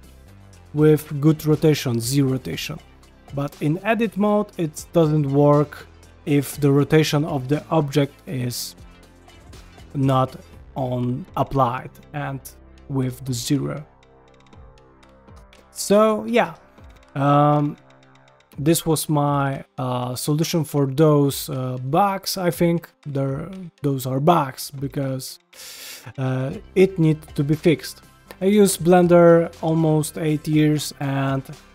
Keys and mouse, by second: 0.6 middle click, 1.3 g, 2.0-2.4 middle drag, 2.6 g, 3.2-3.6 middle drag, 3.8 g, 4.5-5.0 middle drag, 14.0 middle click, 14.3 Tab, 14.7 middle click, 15.3 Tab, 16.1 shift+middle drag, 16.5 ctrl+middle drag, 16.9-17.3 middle drag, 17.4 shift+middle drag, 20.4 ctrl+Tab, 26.0 middle click, 26.7 shift+middle drag.